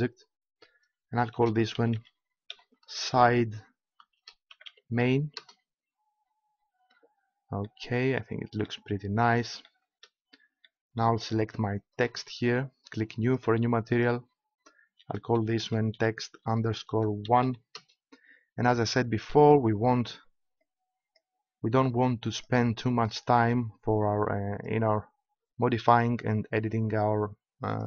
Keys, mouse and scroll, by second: 8.0-9.4 middle drag, 10.7-11.9 middle drag, 11.9-14.7 right drag, 13.2-17.4 drag, 20.5-23.6 drag, 24.5-26.4 drag.